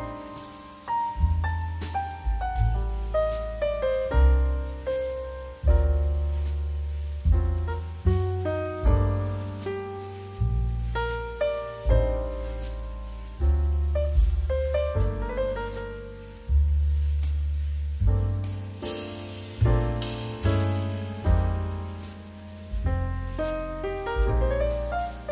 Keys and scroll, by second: 0.5 KP_2, 0.6 KP_1, 1.0 Escape, 1.9 x, 2.2 KP_1, 2.3 KP_0, 2.5 KP_Decimal, 3.7 z, 4.6 x, 6.1 x, 7.2 KP_9, 7.4 e, 8.0 d, 13.7 z, 17.8 z, 19.9 m, 20.3 n, 21.0 ctrl+z, 23.1 q, 24.9 space.